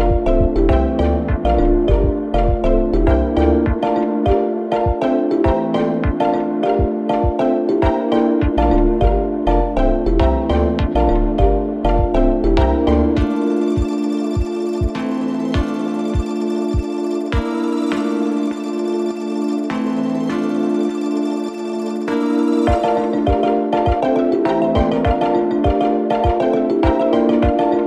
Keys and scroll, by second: 5.4 4, 10.2 3, 15.1 ], 15.8 4, 17.9 3, 24.1 4, 25.7 ].